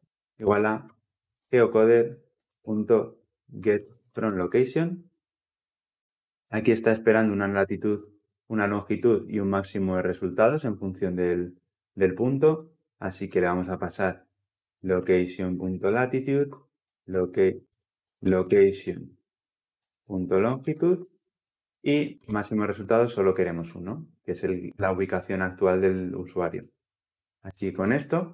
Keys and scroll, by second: 2.2 Return, 6.2 ctrl+p, 15.2 Return.